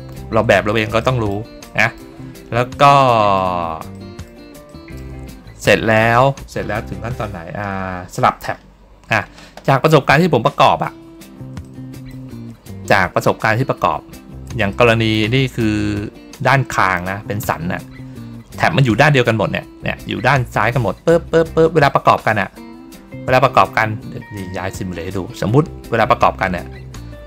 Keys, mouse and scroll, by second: 0.9 middle click, 1.6 middle click, 2.9 middle click, 3.8 middle click, 4.6 middle click, 10.4 middle click, 11.1 ctrl+middle click, 11.5 middle click, 13.5 ctrl+middle click, 14.6 middle click, 23.4 click, 24.3-27.2 drag.